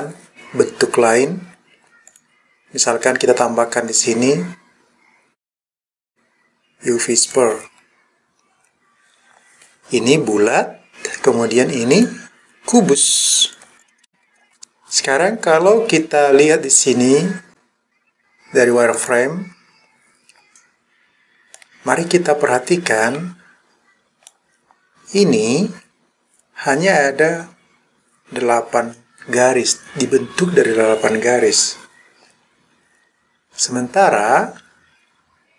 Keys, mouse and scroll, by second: 2.1 click, 3.9-7.4 drag, 12.0 click, 13.5 click, 19.0 click, 21.6-24.3 middle drag.